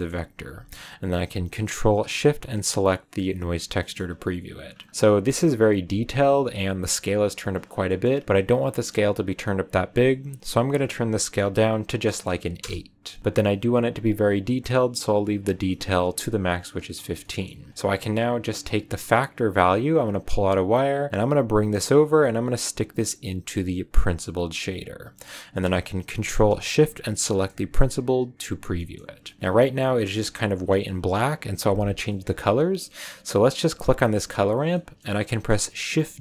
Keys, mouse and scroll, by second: 0.1-0.4 scroll up 2, 2.4 ctrl+shift+click, 3.7 scroll up 1, 3.7 middle click, 4.2-5.6 scroll up 6, 8.4 scroll up 2, 8.7-10.2 middle drag, 10.2-13.2 drag, 15.3-16.1 scroll down 3, 16.6-17.2 scroll down 1, 17.2-17.6 middle drag, 17.7-20.0 middle drag, 20.0 click, 27.1 ctrl+shift+click, 28.7 middle click, 29.4-30.1 scroll down 1, 31.8 scroll up 1, 32.0 middle click, 32.3-33.0 scroll up 2, 33.3 click, 34.7-36.2 middle drag.